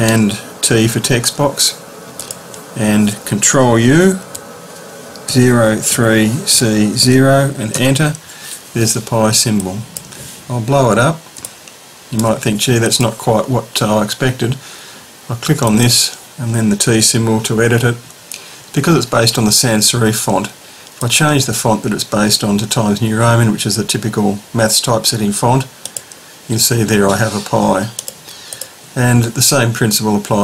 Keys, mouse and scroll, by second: 0.9 t, 2.2 click, 4.0 ctrl+u, 5.3-7.0 typing, 7.7 Return, 9.7 click, 11.4 ctrl+shift+click, 12.8 click, 15.7 click, 16.9 t, 21.0 click, 22.7 scroll down 1, 25.8 click, 28.0 click.